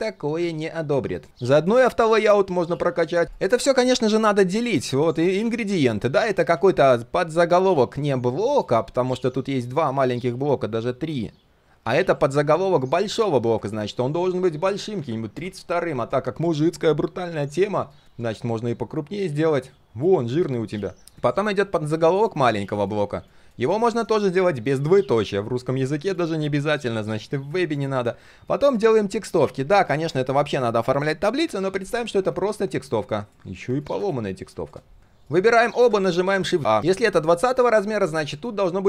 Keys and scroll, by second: 1.3 ctrl+c, 2.4 ctrl+v, 6.1 ctrl+x, 6.5 ctrl+z, 12.6 ctrl+c, 13.6 ctrl+v, 18.1 ctrl+b, 21.0 ctrl+z, 21.3 ctrl+v, 27.5 ctrl+x, 28.8 ctrl+v.